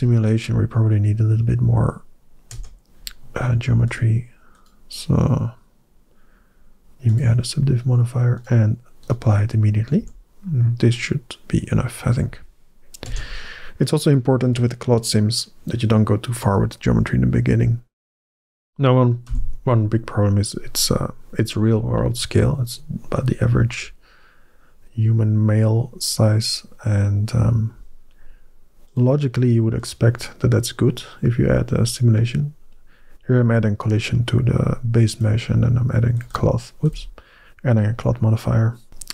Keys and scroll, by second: 2.4 Tab, 9.8 Tab, 12.9 Tab, 18.0 1, 19.1 n.